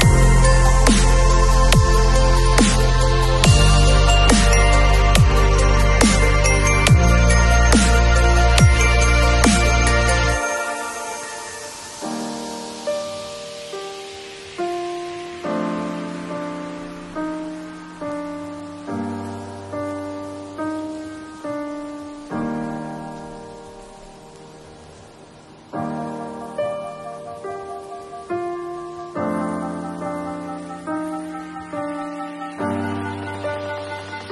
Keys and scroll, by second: 7.5 [, 12.1 ], 13.9 ], 14.0 [, 15.3 ], 21.5 [, 25.6 ], 28.8 [, 33.7 super+d, 33.9 super+v.